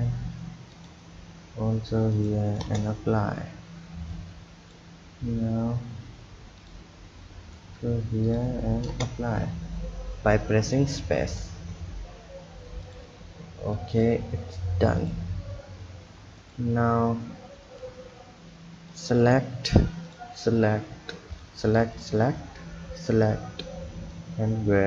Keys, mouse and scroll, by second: 0.7-3.8 drag, 4.1-9.6 drag, 9.6-10.8 scroll down 3, 10.8 click, 12.8 click, 13.8 click, 15.0-17.5 drag, 17.5-18.9 scroll up 1, 18.9 click, 20.0 shift+click, 21.3 shift+click, 21.9 shift+click, 23.0 shift+click, 24.1 click.